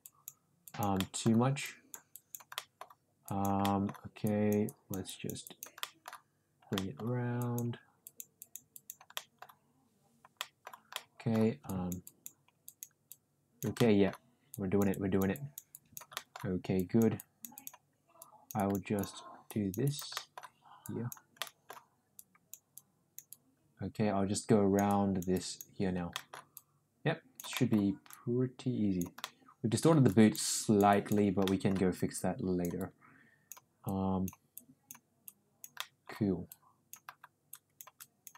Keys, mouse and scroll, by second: 0.0 click, 0.6 click, 0.9 middle click, 1.6 click, 2.1 click, 2.5 middle click, 3.2 click, 3.6 middle click, 4.2 click, 4.7 click, 5.1 click, 5.4 click, 5.8 middle click, 6.7 middle click, 7.3 click, 8.0 click, 8.4 click, 8.7 click, 9.1 middle click, 10.3 middle click, 10.9 middle click, 11.6 click, 12.0 click, 12.6 click, 13.0 click, 13.7 middle click, 14.5 click, 14.9 click, 15.3 click, 15.7 click, 16.1 middle click, 16.7 click, 17.1 click, 17.5 click, 18.1 click, 18.9 click, 19.4 click, 19.8 click, 20.1 middle click, 20.8 click, 21.4 middle click, 22.1 click, 22.7 click, 23.3-24.8 drag, 24.8 click, 25.3 click, 26.1 middle click, 26.5 click, 27.5 middle click, 28.1 click, 29.2 middle click, 30.1 click, 30.5 click, 30.9 click, 31.4 middle click, 32.1 click, 32.8 click, 33.8 click, 34.5 click, 35.2 click, 35.8 middle click, 36.4 click, 37.5 click, 37.9 click.